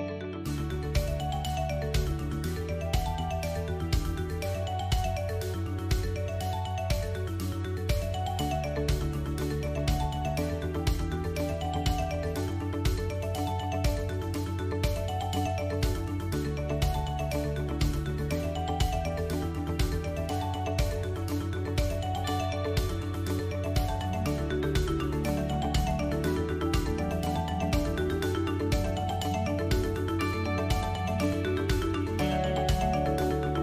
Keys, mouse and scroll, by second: 1.7 e, 4.1 middle click, 4.9 click, 5.2 middle click, 6.0 shift+click, 6.6 KP_7, 8.0 middle click, 8.8 KP_7, 11.5 alt+e, 21.7 alt+e, 25.2 middle click, 27.5 middle click, 28.6 ctrl+r, 31.0 ctrl+r.